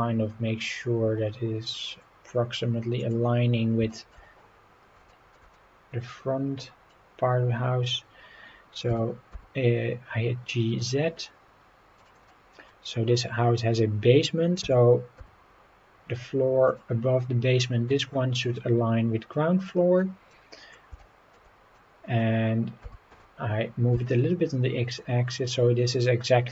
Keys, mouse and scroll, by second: 3.0 click, 3.5-3.8 scroll up 3, 3.9 shift+middle drag, 5.1 shift+middle click, 5.5-6.9 middle drag, 12.0 click, 12.3-12.7 middle drag, 12.8 scroll up 3, 14.6 g, 15.1 z, 16.6-19.6 drag, 19.6 scroll down 2, 20.0-20.7 middle drag, 21.0 shift+middle click, 21.7 middle click, 22.8 g, 23.1 y, 23.9 x, 25.3 click.